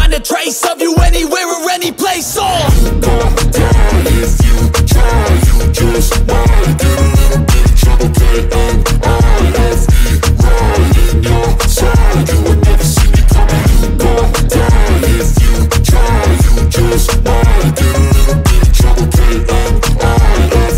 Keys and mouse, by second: 2.5 ctrl+i, 3.0-8.9 typing, 10.3 b, 11.1 b, 11.8 b, 15.7 click, 16.6-17.2 ], 17.2-19.6 drag, 19.7-20.7 drag.